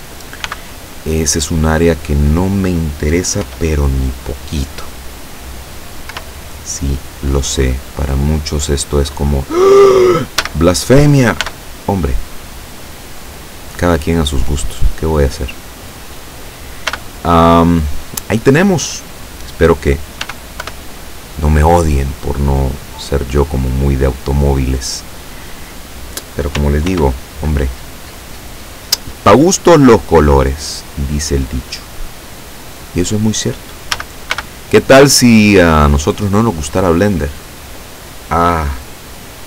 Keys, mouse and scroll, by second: 0.5 b, 1.6 click, 3.5 e, 6.2 y, 8.7 click, 10.5 a, 11.5 b, 11.9-13.0 drag, 13.4-16.2 drag, 17.0 b, 17.8 click, 20.3 e, 20.7 y, 23.2 click, 27.0 ctrl+r, 28.2 click, 32.8 click, 34.0 a, 34.4 b, 35.1-36.5 drag.